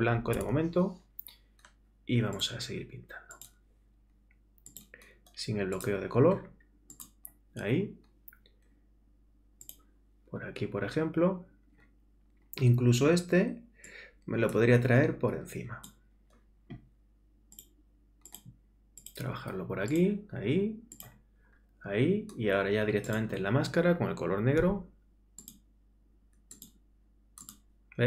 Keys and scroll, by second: 0.3 alt+super+BackSpace, 0.9 alt+BackSpace.